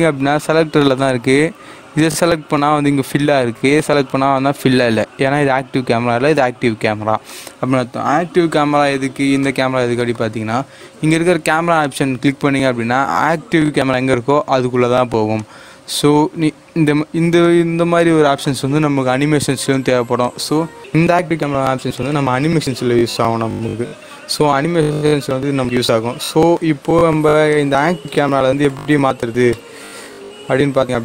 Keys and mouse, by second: 1.9 click, 7.2-11.8 drag, 15.3-20.2 drag, 21.9-31.0 drag.